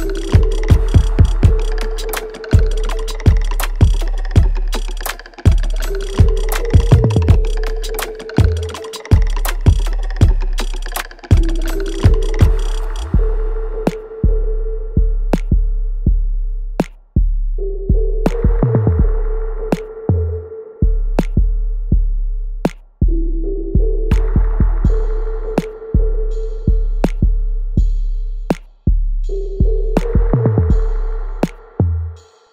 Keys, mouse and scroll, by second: 8.7 alt+click, 9.5 alt+middle click, 10.8 shift+click, 12.4-13.7 alt+drag, 15.2 alt+middle click, 15.7 alt+click, 16.4 alt+middle click, 16.8 alt+right click, 17.6 shift+click, 18.9 ctrl+z, 19.7 shift+click, 21.0 alt+right click, 21.4 alt+click, 21.8 alt+middle click, 22.1 alt+right click, 22.5 alt+click, 26.4 alt+right click, 26.8 alt+click, 27.4 alt+right click, 27.8 alt+middle click, 28.1-30.8 alt+drag, 30.8 alt+middle click, 31.2 alt+right click, 31.7 alt+click, 32.1 alt+middle click.